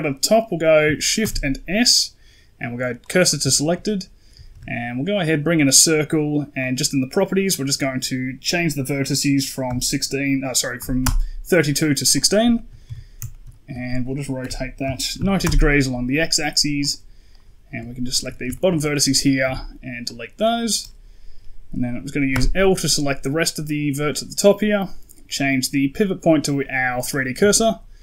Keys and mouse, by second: 1.1 shift+s, 4.4 shift+a, 7.4-10.9 drag, 12.4 shift+middle click, 12.7 KP_1, 13.2 shift+middle click, 14.3 r, 17.2 right click, 17.9 ctrl+right click, 18.4 shift+middle click, 18.8 ctrl+middle click, 19.3 x, 22.2 l, 25.3-27.0 drag, 27.3 shift+middle click.